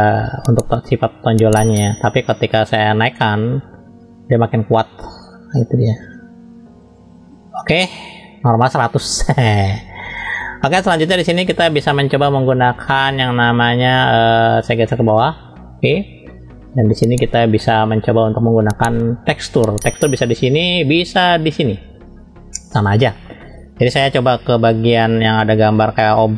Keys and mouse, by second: 0.2-2.0 middle drag, 3.2-8.3 drag, 9.5 middle click, 10.3 shift+middle click, 11.3 shift+middle click, 11.9 middle click, 12.9 click, 14.9 click, 15.9 shift+middle click, 16.5 middle click, 16.9 shift+middle click, 22.8 click.